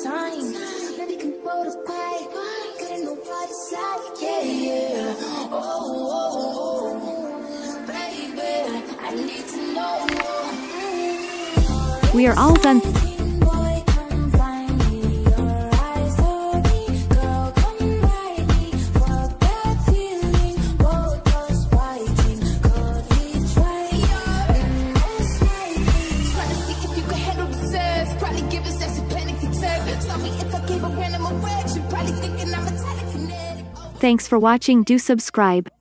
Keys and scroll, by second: 12.5 space.